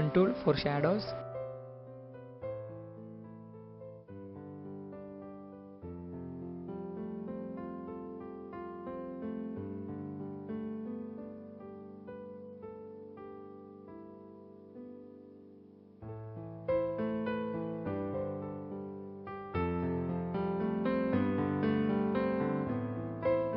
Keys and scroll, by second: 6.2 space, 9.5-10.5 typing, 12.8 space, 14.0 typing, 15.4-15.9 typing, 17.2-21.9 typing, 23.1-23.5 typing.